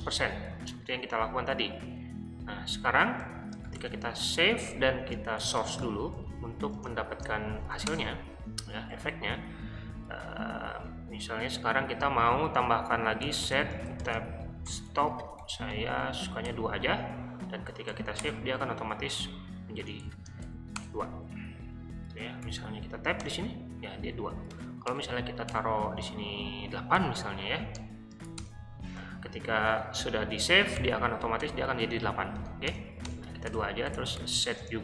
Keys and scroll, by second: 0.0-0.5 typing, 2.5 Return, 3.1-7.1 typing, 7.9 Return, 9.0 j, 11.7 o, 13.0-16.5 typing, 17.4 Escape, 17.5-18.2 typing, 19.5-20.8 typing, 22.5 i, 23.3 Tab, 24.5 BackSpace, 24.9 BackSpace, 25.5 BackSpace, 27.0 8, 27.5 Escape, 28.0-28.4 typing, 30.8 o, 31.4 Tab, 32.4-34.6 typing, 33.5 Return.